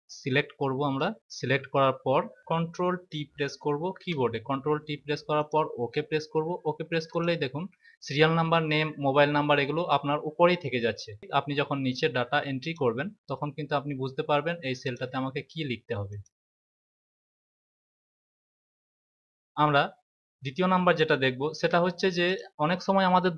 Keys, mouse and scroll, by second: 3.9 ctrl+t, 7.0 click, 12.5 click, 14.8 click, 16.0 click, 21.4 ctrl+z, 22.2 click.